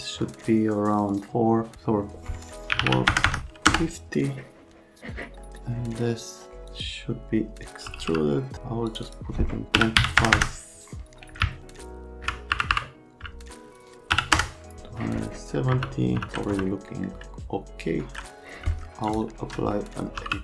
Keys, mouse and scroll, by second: 0.2 KP_Divide, 0.9 KP_Divide, 1.1 KP_Divide, 2.7 KP_4, 2.8 KP_5, 3.1 KP_0, 3.2 KP_0, 3.7 KP_Enter, 7.6-8.5 typing, 9.7 KP_3, 10.0 KP_7, 10.2 KP_0, 10.3 KP_0, 11.4 Left, 12.5 Delete, 12.7 Delete, 14.1 KP_1, 14.3 KP_Enter, 15.7 F3, 16.5 F3, 19.8-20.4 typing.